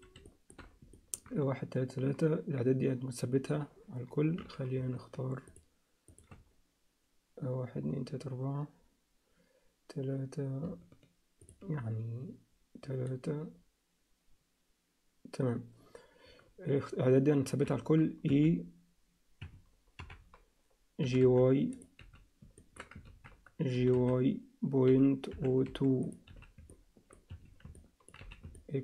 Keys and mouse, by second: 0.3 alt+shift+middle click, 0.9 ctrl+alt+middle click, 5.5 shift+click, 18.3 e, 20.0 KP_7, 21.0 g, 22.0 z, 22.7 ctrl+middle click, 23.1 ctrl+z, 23.7 g, 26.3 z, 27.9 alt+middle click, 28.2 z, 28.6 alt+middle click.